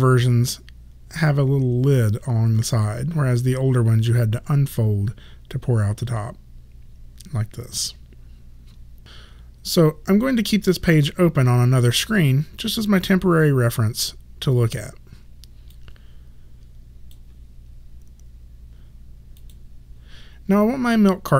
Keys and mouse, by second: 15.8 click, 19.4 click.